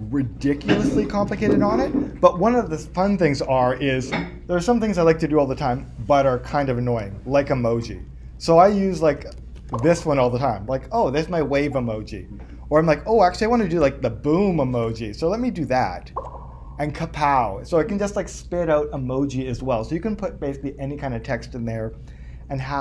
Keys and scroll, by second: 1.3 super+Tab, 12.4 Return, 14.8 BackSpace.